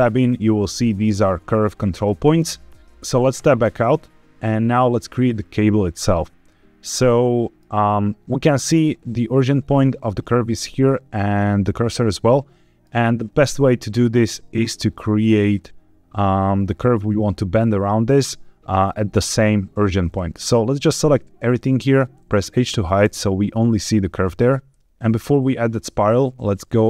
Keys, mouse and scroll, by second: 0.6 middle click, 2.4 middle click, 2.8 Tab, 3.3 Tab, 3.7 middle click, 4.5-4.8 scroll down 2, 6.1-7.5 middle drag, 11.5 shift+middle click, 11.9 middle click, 13.3-14.6 scroll up 1, 20.3-21.4 drag, 22.9 h, 26.3-26.8 drag.